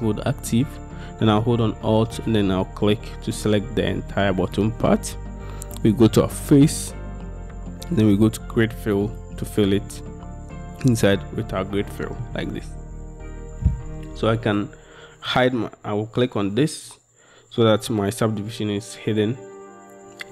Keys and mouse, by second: 6.5-9.3 drag, 11.5 middle click, 15.4-20.3 drag.